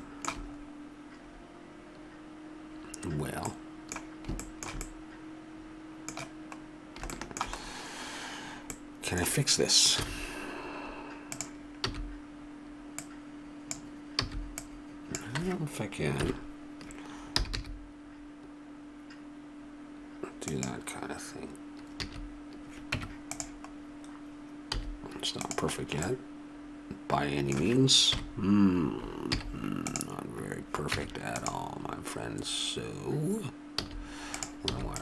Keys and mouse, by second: 3.2 middle click, 6.5 middle click, 10.0 z, 11.9 b, 14.2 b, 16.2 KP_1, 17.3 g, 22.0 a, 22.9 Tab, 24.7 z, 28.2 KP_1, 29.3 z, 30.9 Tab, 33.8 z, 34.7 b.